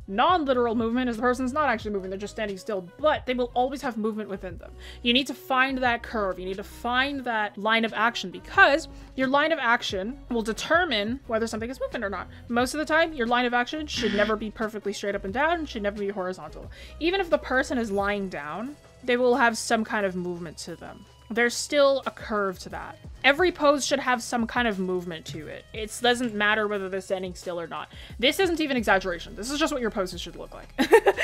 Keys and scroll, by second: 14.4 ctrl+z, 16.3 ctrl+z, 19.7 ctrl+z, 23.3 ctrl+z.